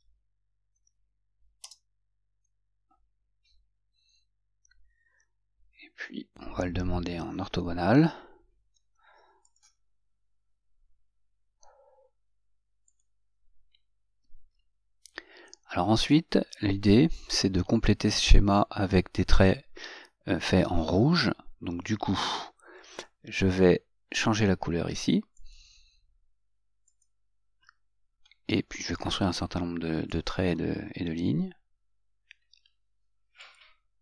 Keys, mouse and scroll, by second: 1.8 Return, 8.8 F8, 9.7 click, 13.1 click, 25.5 click, 27.1 click, 30.3 click, 33.6 click.